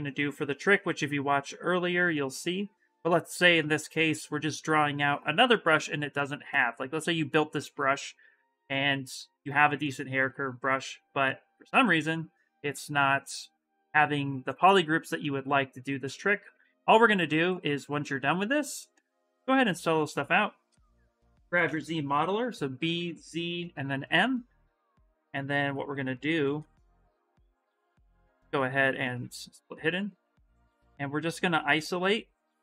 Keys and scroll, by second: 19.2 s, 21.4 b, 22.6 z, 23.3 m, 27.4 2.